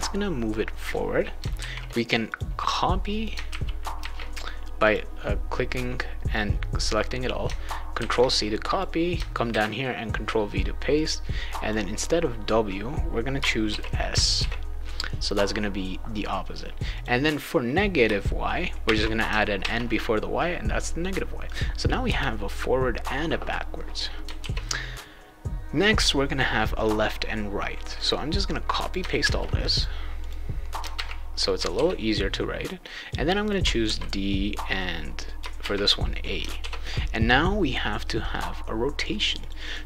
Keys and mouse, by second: 1.6 ctrl+a, 1.6 ctrl+s, 2.3 click, 2.7 click, 3.5 ctrl+c, 3.9 ctrl+v, 4.8 click, 6.3 click, 8.0 ctrl+c, 8.6 click, 9.5 ctrl+v, 10.9 click, 13.7 shift+s, 14.3 ctrl+s, 16.9 click, 18.8 shift+n, 19.6 ctrl+s, 21.4 click, 22.0 Return, 24.4 ctrl+s, 27.9 click, 29.2 ctrl+c, 29.7 click, 30.2 click, 30.9 ctrl+v, 31.7 ctrl+s, 33.0 click, 33.8 shift+d, 34.7 click, 35.6 shift+a, 36.6 ctrl+s, 39.4 click, 39.6 click.